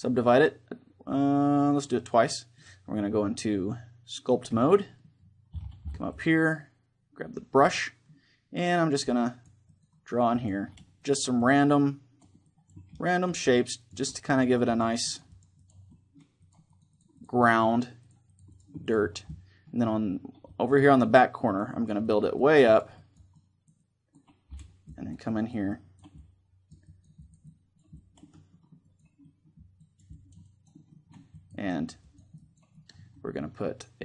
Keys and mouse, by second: 4.7-5.8 middle drag, 7.4 click, 7.8-9.5 middle drag, 8.8-20.5 drag, 12.6-15.5 middle drag, 15.6-18.8 middle drag, 19.0-22.2 middle drag, 21.0-33.9 drag, 28.0-33.9 middle drag.